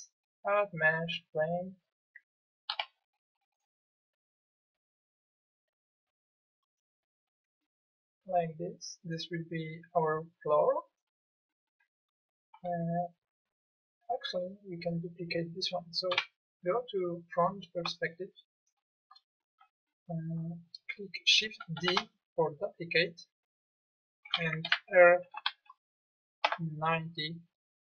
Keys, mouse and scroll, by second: 2.7 s, 16.1 KP_1, 21.8 shift+d, 24.7 r.